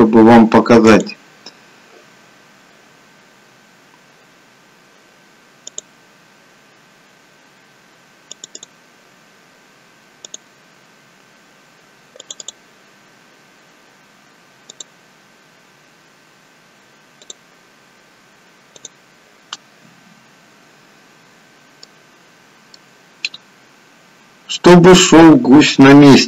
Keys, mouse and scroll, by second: 21.5 scroll up 1, 21.8 middle click.